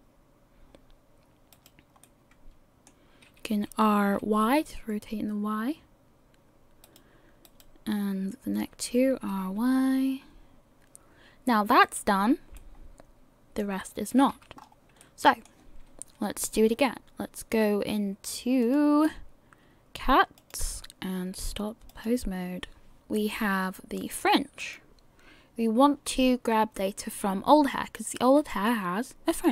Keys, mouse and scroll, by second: 2.0 middle click, 3.5 r, 8.3 right click, 9.1 r, 12.2-12.7 scroll down 5, 12.6 middle click, 14.1 a, 14.6-15.2 scroll up 3, 15.0 middle click, 18.6 click, 23.2 click, 28.5 click.